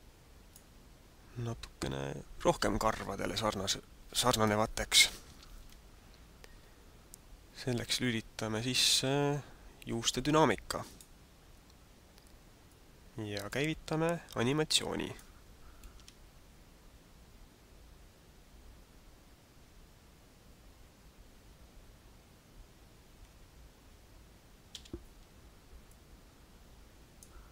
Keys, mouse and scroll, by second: 5.8-6.4 scroll up 2, 10.8 click, 12.7 click, 14.4 click, 15.9 alt+a, 24.7 alt+a, 25.9 click.